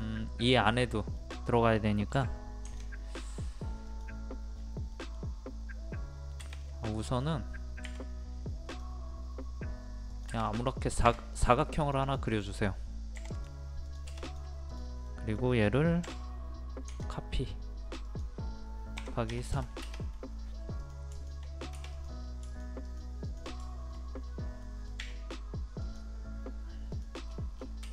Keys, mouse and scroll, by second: 2.7 ctrl+click, 4.5-4.8 scroll up 1, 4.9-7.5 middle drag, 7.5 scroll up 1, 7.8 r, 8.7 click, 15.1 middle click, 16.9 ctrl+click, 19.3 KP_3, 20.8 click, 21.1 shift+click, 22.5 shift+click, 23.2 shift+click, 23.6 shift+middle click, 24.2 scroll up 1, 24.6 middle click, 25.8 click, 27.3-27.8 scroll down 1.